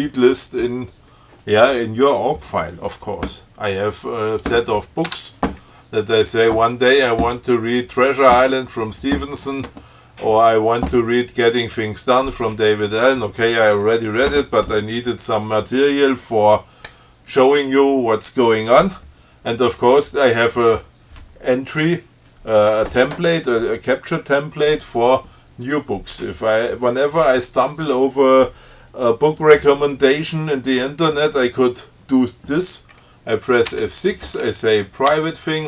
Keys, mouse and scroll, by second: 4.5 click, 5.3 Tab, 34.0 F6, 35.3 p.